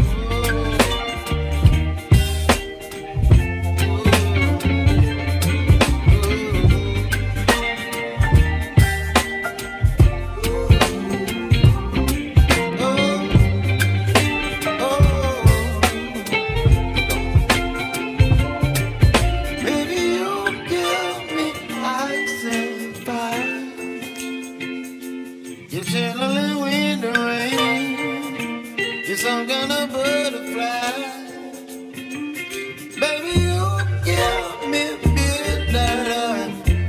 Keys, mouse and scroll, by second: 0.1 s, 2.4-5.0 middle drag, 8.3 ctrl+r, 9.2 ctrl+r, 11.0-13.5 middle drag, 15.6-16.4 scroll down 2, 16.4 a, 17.3 r, 20.3 shift+middle click, 20.6-21.2 scroll down 3, 21.2-21.7 scroll down 4, 21.7-23.7 shift+middle drag, 27.7-28.0 scroll down 2, 28.0 shift+middle click, 28.9 g, 32.0-32.4 scroll up 4, 32.4-33.7 shift+middle drag, 33.7 g.